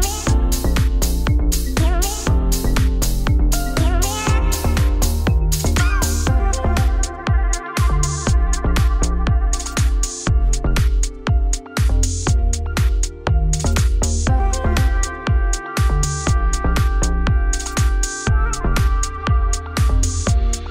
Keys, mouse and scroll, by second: 2.1 middle click, 2.7 3, 2.8-6.8 drag, 6.8 s, 9.3 Tab, 9.6-11.5 middle drag, 11.5 Tab, 11.9 middle click, 12.1 shift+click, 12.3 middle click, 13.5 middle click, 14.3 alt+e, 19.7 middle click, 20.3-20.7 scroll down 2.